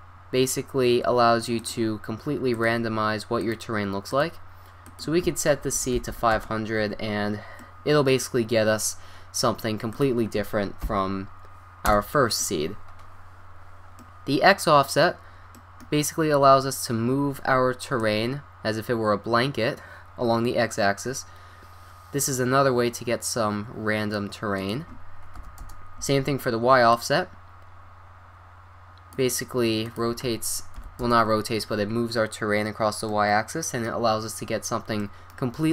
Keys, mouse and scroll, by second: 1.6-6.8 drag, 6.1 0, 9.9-11.7 drag, 12.3-12.9 scroll up 1, 12.9-13.3 scroll up 1, 13.3-16.0 middle drag, 18.0-20.1 drag, 24.6-26.3 drag, 26.9-28.7 drag, 29.9-31.9 drag, 32.4-33.2 middle drag, 35.4 middle click.